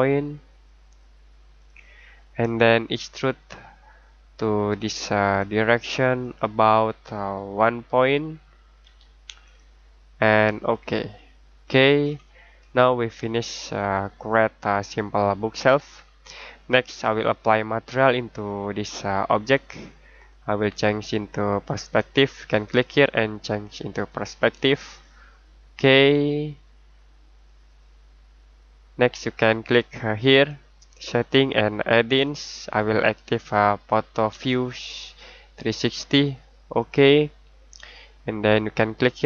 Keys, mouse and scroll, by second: 1.5 click, 8.8 1, 9.4 click, 11.4 scroll down 1, 11.6-13.0 scroll up 1, 13.0-14.9 scroll down 1, 14.9 middle click, 21.9 click, 25.0 middle click, 30.4 click.